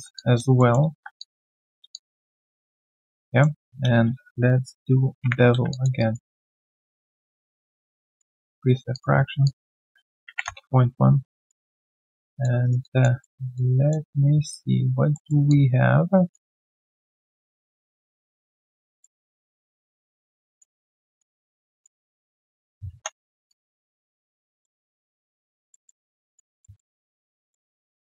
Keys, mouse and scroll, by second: 0.1 alt+click, 1.2 alt+middle click, 2.7 alt+right click, 2.9 alt+click, 3.2 alt+middle click, 5.7 alt+click, 5.9 alt+right click, 6.3 alt+middle click, 6.6 alt+right click, 10.0-10.8 typing, 11.4 alt+right click, 11.6 alt+click, 11.9 alt+middle click, 12.2 alt+click, 12.6 alt+right click, 12.8 alt+click, 13.2 alt+middle click, 13.5 alt+click, 15.1 alt+middle click, 15.5 alt+click, 18.3 alt+click, 18.8 alt+middle click, 19.2 alt+click, 20.8 alt+right click, 21.0 alt+click, 21.4 alt+middle click, 21.7 alt+click, 22.0 alt+middle click, 22.3 alt+click, 22.9 3, 23.3 alt+right click, 23.7 alt+middle click, 24.0 alt+click, 24.5 alt+middle click, 24.8 alt+click, 25.7 alt+middle click, 26.0 alt+click, 26.6 alt+middle click, 27.7 alt+click.